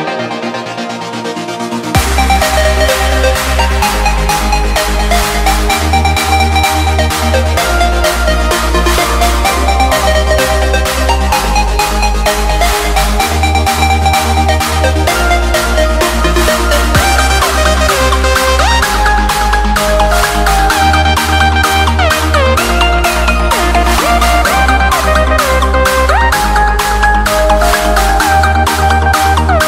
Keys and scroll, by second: 1.2 Escape, 9.5 Return, 22.3 Return.